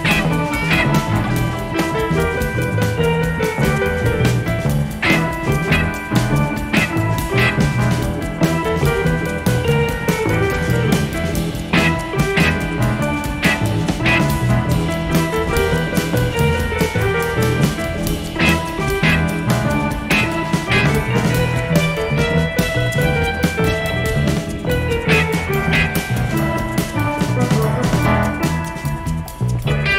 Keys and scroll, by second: 6.3 F1, 6.9 ▬, 8.8 +, 9.6 ctrl+d, 10.3 shift+F6, 12.7 F1, 13.2 ctrl+-, 14.2-14.6 typing, 19.6 space, 22.5 shift+F6.